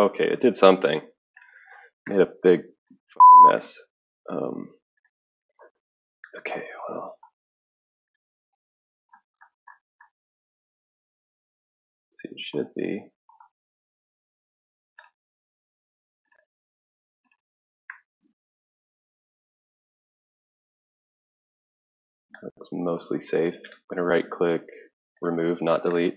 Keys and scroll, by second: 5.4 ctrl+4, 5.4 ctrl+5, 5.4 ctrl+6.